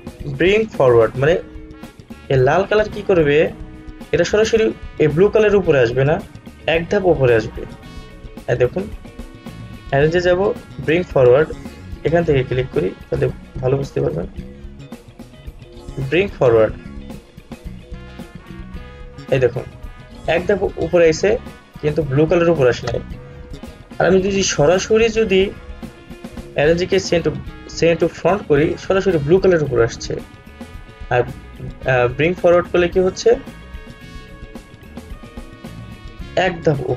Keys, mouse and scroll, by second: 2.7 click, 8.5 right click, 11.9 click, 14.0 right click, 18.9 click, 23.4 click, 23.6 ctrl+z, 25.1 right click, 26.3 click, 31.0 ctrl+z, 33.1 right click, 36.0 click.